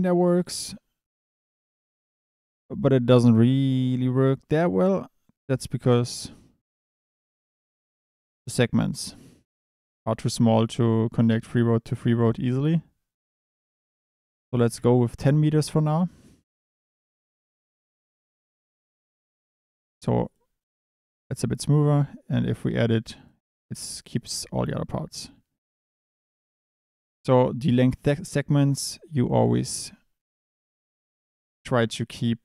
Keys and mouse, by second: 0.5 click, 3.0 Tab, 3.9-6.0 drag, 7.0-13.5 drag, 13.8 click, 15.7 click, 16.2 click, 16.8 click, 18.3 click, 18.6 Tab, 19.2 Tab, 20.2 click, 22.7 click, 24.6 middle drag, 25.8 click, 30.0 KP_7.